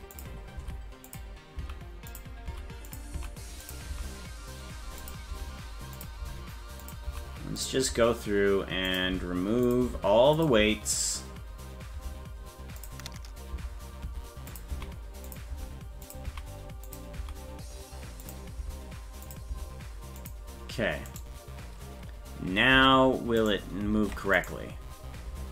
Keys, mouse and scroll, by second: 0.1 click, 0.6 Down, 1.1 click, 1.6 Down, 2.1 click, 2.5 Down, 2.9 click, 3.2 Down, 3.6 click, 3.9 Down, 5.1 click, 5.3 Down, 6.0 click, 6.2 Down, 6.8 click, 7.1 Down, 7.6 click, 7.9 Down, 8.9 click, 9.1 Down, 9.7 click, 9.9 Down, 10.4 click, 10.6 Down, 12.1 Down, 12.8 click, 13.5 Down, 14.1 Down, 14.5 click, 14.7 Down, 15.3 click, 15.5 Down, 16.1 click, 16.3 Down, 16.9 click, 17.2 Down, 18.2 click, 18.6 Down, 19.3 click, 19.5 Down, 20.2 click, 21.1 right click, 22.8 Tab, 23.5 right click, 24.0 ctrl+Tab, 24.5 right click.